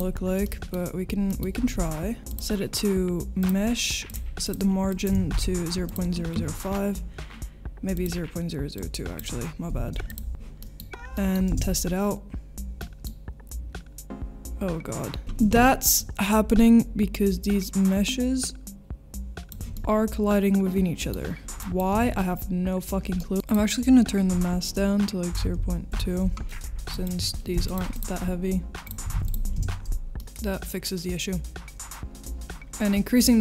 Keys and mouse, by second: 0.4 middle drag, 1.3 middle click, 2.3-3.6 drag, 4.1-5.9 drag, 7.9-10.1 drag, 10.6 middle click, 11.1 middle click, 11.4 space, 15.2 ctrl+s, 15.2 space, 19.7-21.1 middle drag, 22.1 ctrl+s, 23.3 ctrl+s, 23.3 middle click, 23.5-28.0 drag, 28.9 click, 29.6 space.